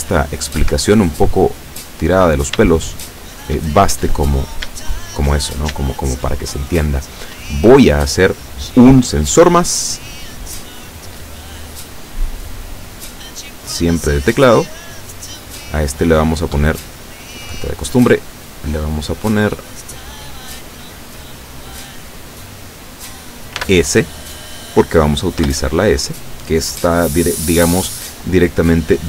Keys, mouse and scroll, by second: 0.7 Escape, 1.7 scroll down 2, 2.8 shift+middle click, 4.1 middle click, 4.9 shift+middle click, 5.5 shift+scroll up 2, 5.9 shift+middle click, 10.1 click, 10.8 click, 13.7 click, 15.3 scroll down 3, 16.0 scroll up 1, 17.3 click, 19.0-19.4 scroll up 1, 20.4 click, 21.8 click, 23.6 s, 25.4 Return.